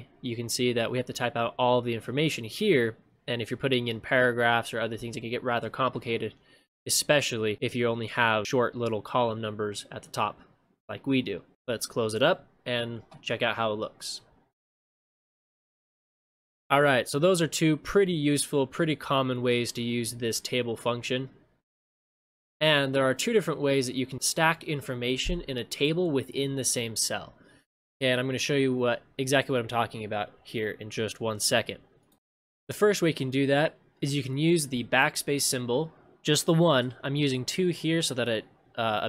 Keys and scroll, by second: 15.0 ctrl+shift+space, 21.9 ctrl+shift+space, 22.4 ctrl+v, 32.2 ctrl+c, 32.2 ctrl+v.